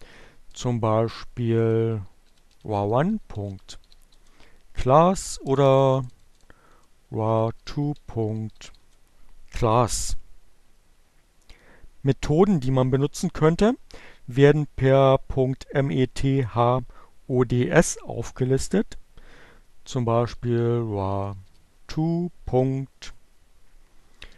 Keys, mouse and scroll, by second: 0.4-3.8 typing, 3.9 Return, 4.9 BackSpace, 6.0-8.6 typing, 18.1-19.1 typing, 20.6-21.7 typing, 23.2-24.3 typing.